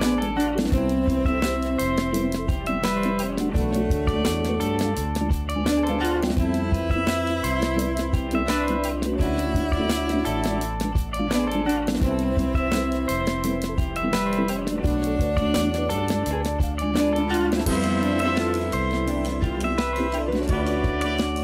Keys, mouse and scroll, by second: 0.1 scroll up 1, 0.5 g, 2.3 s, 4.4-6.6 scroll down 1, 7.0 g, 8.6-9.8 scroll up 3, 9.8-10.2 scroll down 1, 10.2-10.7 scroll up 1, 10.7-11.3 shift+middle drag, 11.3-11.9 scroll up 1, 11.9 s, 13.6 scroll down 1, 13.9-14.3 scroll up 2, 14.3 g, 15.2-17.2 scroll down 1, 17.2-18.1 scroll down 3, 18.1 click, 18.7 shift+d, 20.5 g.